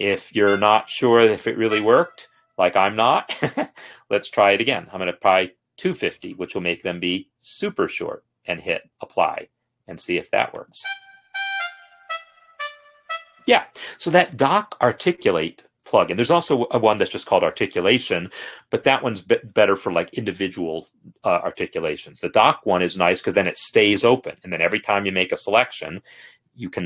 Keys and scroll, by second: 4.0 ctrl+a, 4.4-5.3 typing, 11.3 space, 13.5 space.